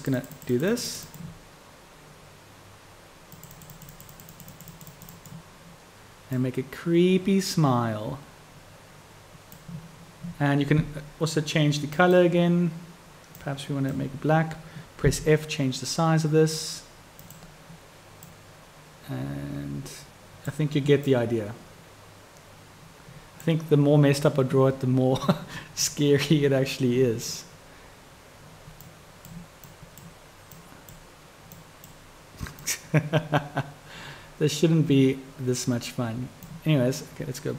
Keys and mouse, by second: 0.1 click, 3.4 click, 3.9 click, 4.3 click, 4.6 click, 5.1 click, 6.5-9.7 drag, 12.1 click, 18.4-20.7 drag, 21.1-23.6 drag, 28.9 click, 29.7-30.1 drag, 30.7 click, 31.7-32.1 drag, 32.7-36.7 drag.